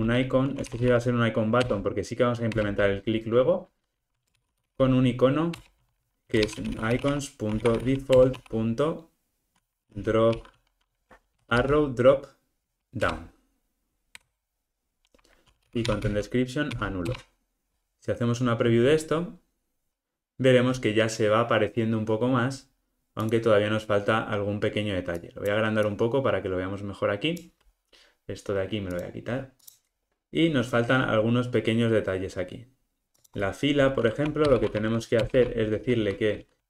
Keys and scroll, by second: 1.7 Return, 13.1 Return, 23.3 super+=.